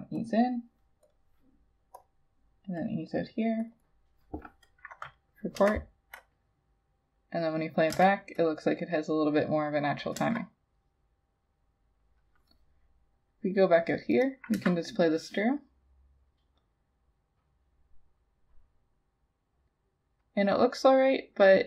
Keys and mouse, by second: 0.4 double click, 3.8 double click, 5.6 Return, 8.0 Return, 10.2 Return, 14.6 Return.